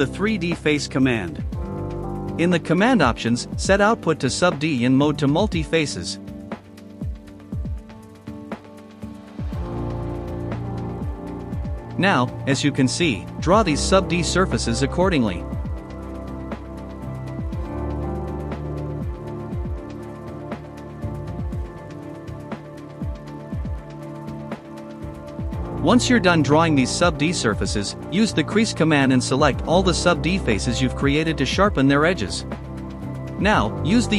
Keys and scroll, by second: 0.9-2.5 typing, 6.2 typing, 13.4 space, 16.4 space, 19.4 space, 22.4 space, 25.2-26.7 typing, 29.3 space, 31.9-33.5 typing.